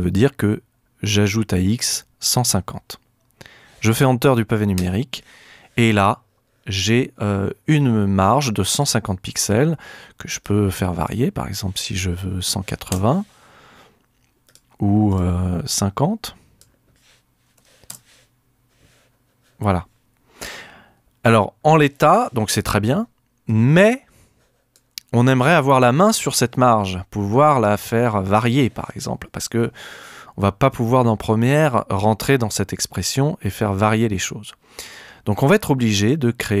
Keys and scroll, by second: 4.8 Return, 12.4 8, 12.9 Return, 17.2-18.1 typing.